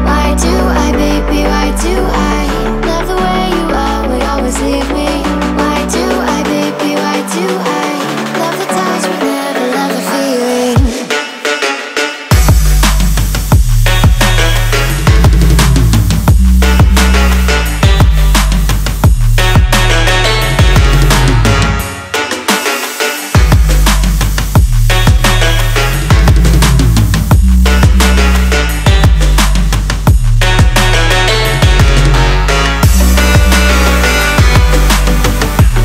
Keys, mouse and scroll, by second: 2.3-7.1 scroll down 5, 7.1-9.9 scroll down 1, 10.5 click, 14.6-17.5 scroll down 2, 18.2-19.3 drag, 20.8-22.9 drag, 23.5 click, 27.7 click, 28.4 right click, 29.7 click, 31.8 click, 33.6 Return.